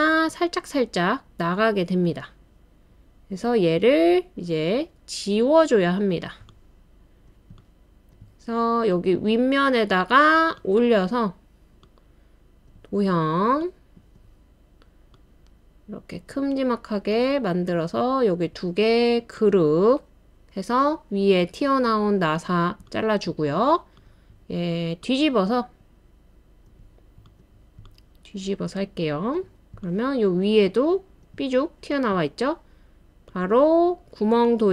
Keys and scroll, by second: 1.2-1.9 typing, 4.6-8.8 typing, 30.3-30.9 typing.